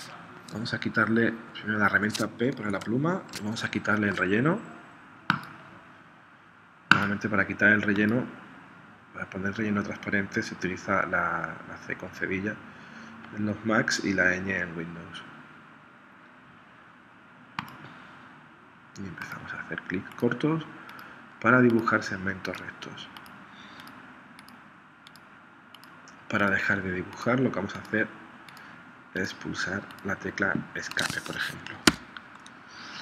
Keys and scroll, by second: 2.7 p, 32.0 Escape.